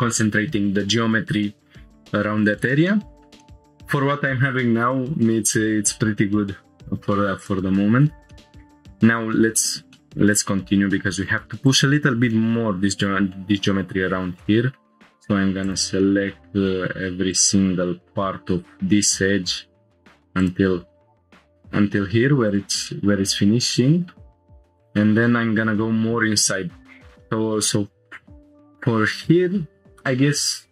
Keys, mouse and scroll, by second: 2.6 scroll down 1, 2.9-3.3 middle drag, 3.4 scroll down 1, 6.1 Tab, 7.4 click, 7.8 scroll up 2, 8.3 shift+middle click, 9.2 scroll up 2, 9.6 shift+middle click, 9.9-10.4 middle drag, 10.6 scroll up 1, 11.7 click, 12.3-13.4 middle drag, 14.4 middle click, 15.6 ctrl+click, 16.0 shift+middle click, 17.3 ctrl+click, 17.8 shift+middle click, 18.2 middle click, 18.9 shift+middle click, 20.4 ctrl+click, 21.0 scroll down 1, 21.2 shift+middle click, 21.2 scroll up 5, 22.5 ctrl+click, 22.9-24.2 middle drag, 24.3-24.9 scroll down 3, 24.8 click, 25.4 scroll down 2, 26.9 scroll down 2.